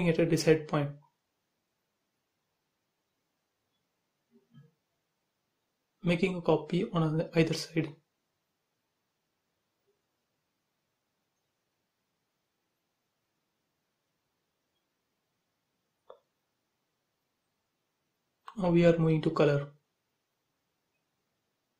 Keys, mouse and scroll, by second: 1.3 m, 4.1 space, 4.9 m, 5.6 ctrl+click, 7.5 space, 9.2 m, 10.3 click, 11.6 Right, 13.5 click, 13.6 space, 13.8 scroll down 1, 14.4 click, 15.0 scroll up 1, 15.2 middle click, 15.3 middle click, 15.6-16.7 scroll down 1, 16.7 b, 18.4 click, 19.0 scroll up 1, 19.4 space, 20.0 click, 20.7 ctrl+click.